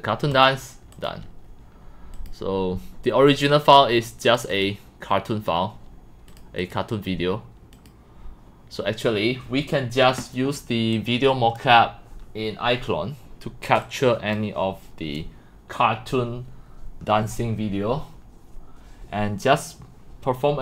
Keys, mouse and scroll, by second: 0.9 click, 3.3 click, 3.9 middle drag, 4.3 click, 4.5 click, 4.9 middle click, 6.4 click, 6.7 click, 7.9 click, 14.3 click, 14.5 click, 14.9 drag, 15.3 drag, 15.9 drag, 16.5-17.3 drag, 17.9-19.3 drag, 19.3 drag.